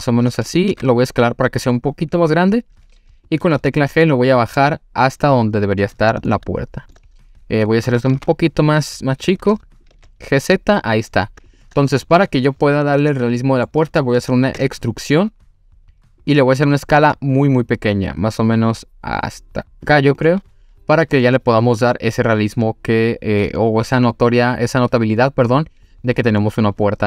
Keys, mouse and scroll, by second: 0.5 click, 0.7 s, 3.3 click, 3.5 g, 3.6 z, 5.7 click, 6.3-7.0 shift+middle drag, 7.2 scroll up 2, 8.1 s, 9.8 click, 9.9 g, 9.9 z, 11.5 click, 11.9 scroll down 1, 12.9-13.7 middle drag, 14.6 e, 16.2 click, 16.5-17.0 scroll up 2, 17.0 s, 19.9 click, 20.2-24.0 middle drag, 26.4-27.0 middle drag.